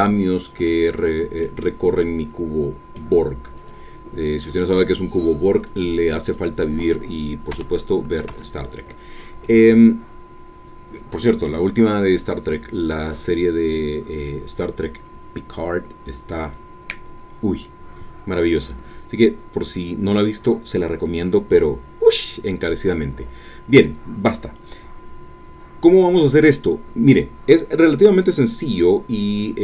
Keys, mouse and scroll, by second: 0.6 Escape, 1.4-3.1 drag, 3.7 click, 4.4 click, 5.5 click, 7.5 g, 8.3 Escape, 9.0-9.4 scroll down 1, 9.4-11.6 drag, 12.0-12.5 scroll up 2, 12.5-12.8 scroll down 2.